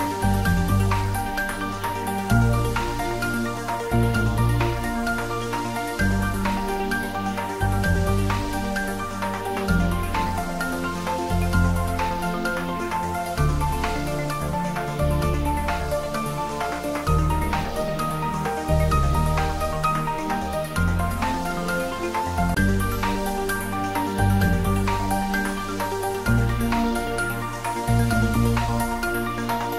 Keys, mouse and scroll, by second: 1.1 click, 1.7 shift+x, 3.2 click, 6.5 g, 7.0 x, 10.4 Left, 11.6 click, 12.0-12.9 middle drag, 14.3 3, 14.7 click, 25.1 middle click, 25.6 shift+z, 25.9-26.5 middle drag, 27.3-28.3 scroll up 1.